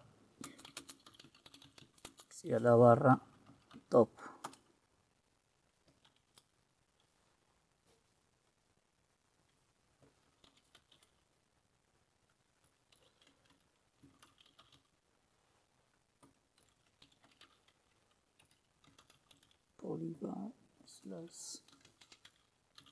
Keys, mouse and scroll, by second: 0.0-4.4 typing, 4.5 Return, 10.2-11.6 typing, 13.0-15.3 typing, 16.5-22.9 typing.